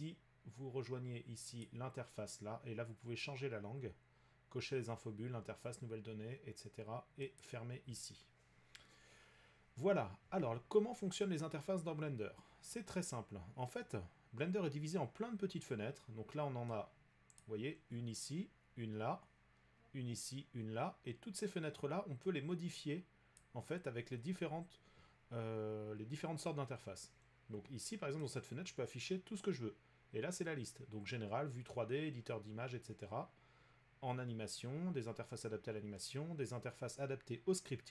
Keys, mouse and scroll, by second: 1.7 click, 3.5-6.8 drag, 7.4-12.5 drag, 17.4-22.3 drag, 23.4 click, 28.4 click.